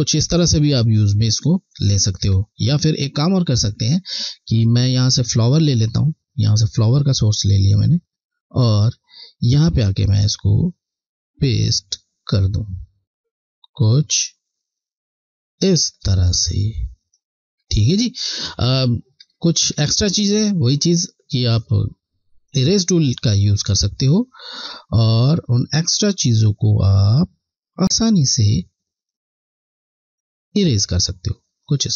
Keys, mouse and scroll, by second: 2.0 click, 6.9 alt+click, 10.5 click, 19.6 scroll, 19.7-21.4 alt+scroll up 2, 21.4 click, 23.7 click, 23.9 click.